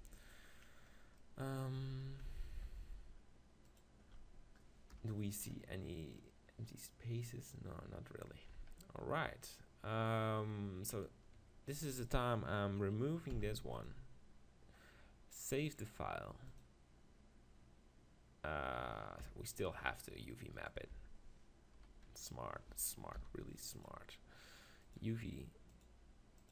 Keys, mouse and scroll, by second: 3.7-5.6 drag, 4.9 KP_0, 6.2-8.2 middle drag, 8.5-10.9 middle drag, 10.9-12.9 right drag, 13.3 x, 15.9-17.5 drag, 19.2 KP_7, 19.9-22.3 middle drag, 21.0 Tab, 21.8 KP_1, 22.1 KP_3, 23.2 u.